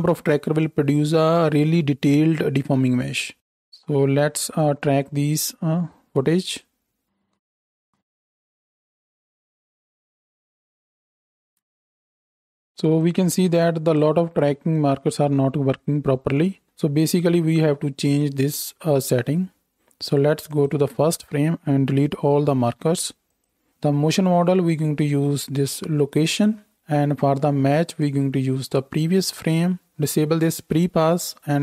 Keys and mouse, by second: 12.2 space, 12.4 space, 19.2-29.9 drag, 22.1 a, 22.6 x, 31.0-31.6 middle drag.